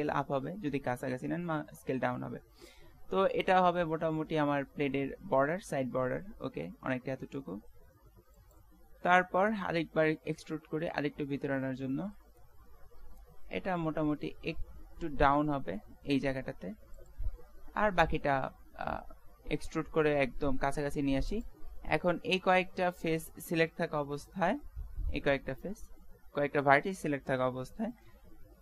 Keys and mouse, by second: 9.8 e, 18.1 e, 22.8 middle click, 24.0 KP_Decimal.